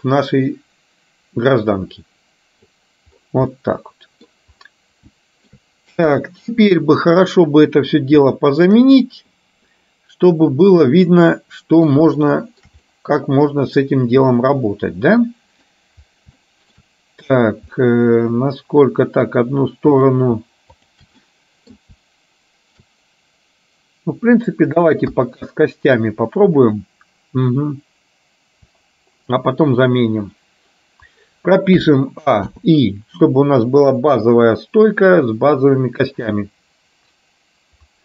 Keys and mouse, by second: 3.7 middle click, 5.2 shift+middle click, 6.2 KP_1, 8.4 middle click, 10.9-11.9 middle drag, 12.3 shift+middle click, 12.9-13.9 middle drag, 14.4-15.7 middle drag, 16.5 shift+middle click, 17.9-19.3 middle drag, 20.0 click, 20.8 shift+click, 21.4 middle click, 25.2 KP_1, 31.9 a, 32.7 i.